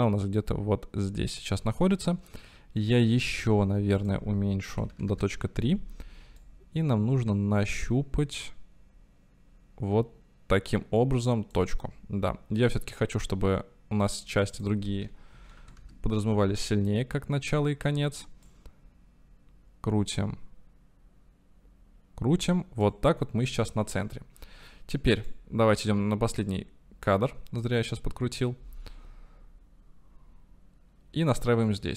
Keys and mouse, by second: 4.2-5.9 drag, 6.5-11.8 drag, 14.6-16.4 drag, 18.4-23.1 drag, 26.5-29.0 drag.